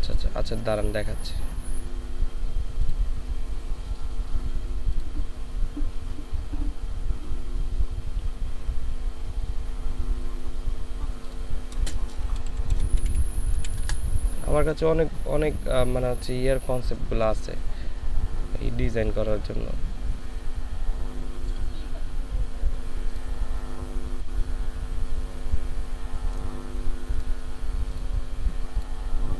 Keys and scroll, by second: 12.0-13.6 typing, 13.8 Return.